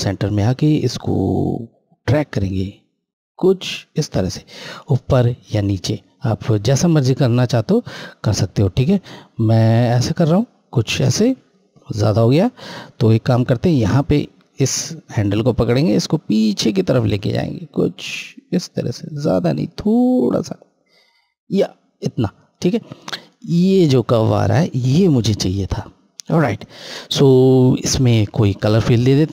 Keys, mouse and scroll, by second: 13.8 click, 22.4 scroll, 22.5 scroll up 1, 24.8 scroll down 1, 26.2 click.